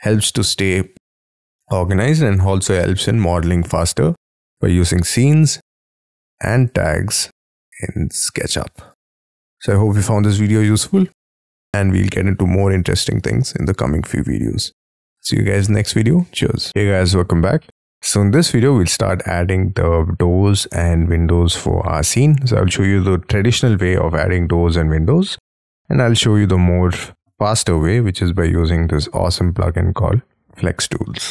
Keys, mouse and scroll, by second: 17.4 middle click, 31.2 middle click.